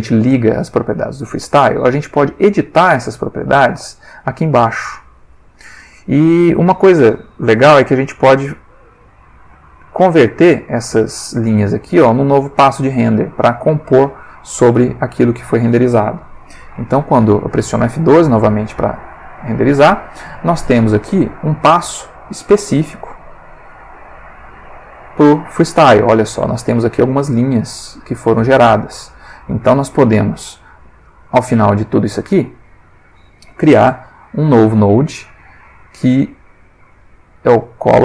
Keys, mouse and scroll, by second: 1.9 click, 3.5 click, 10.0 click, 12.1 middle click, 16.7 F12, 19.8 click, 22.1 ctrl+middle click, 23.4-24.7 drag, 25.0 middle click, 29.8-30.3 drag, 30.6 click, 31.3 click, 32.3 click, 33.8 shift+a.